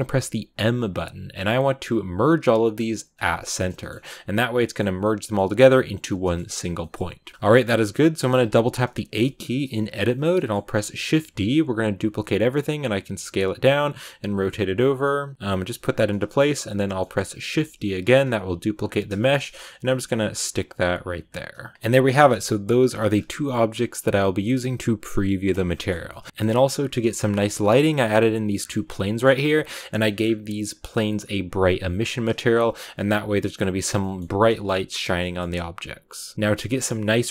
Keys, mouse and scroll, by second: 3.1 m, 3.6-5.4 middle drag, 5.4 g, 6.1-8.2 middle drag, 8.2 a, 8.4 a, 9.1-11.0 shift+middle drag, 11.0 shift+d, 11.9 s, 13.8 r, 14.5 g, 14.9 middle click, 15.3 g, 15.6 r, 16.0-17.4 middle drag, 17.4 shift+d, 18.2 r, 19.1 shift+middle click, 19.6-21.0 typing, 21.7-25.9 shift+middle drag, 25.9 scroll down 1, 26.0-28.2 middle drag, 28.2 right click, 28.5 scroll down 2, 28.6-32.3 middle drag, 32.3 click, 32.8 z, 34.0-37.3 middle drag.